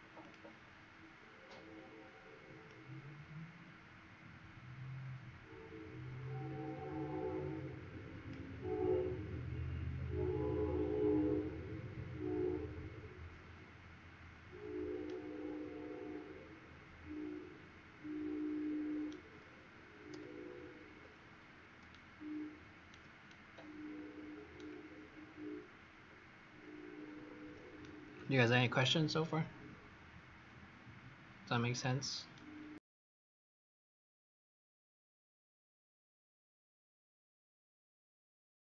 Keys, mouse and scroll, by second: 9.9-10.6 scroll down 1, 10.6 scroll up 1, 14.9 right click, 21.8 shift+right click, 23.2 right click, 25.0-26.0 scroll down 3, 26.0-26.5 scroll up 1, 26.5-26.9 scroll up 1, 27.7 right click, 29.7-31.7 scroll down 2, 31.7 scroll up 2, 32.3 right click.